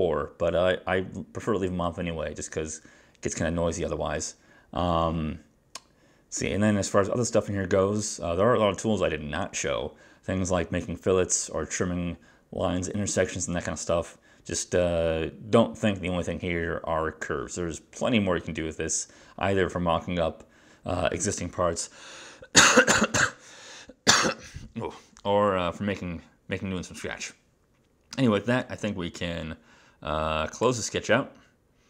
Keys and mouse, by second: 1.8 click.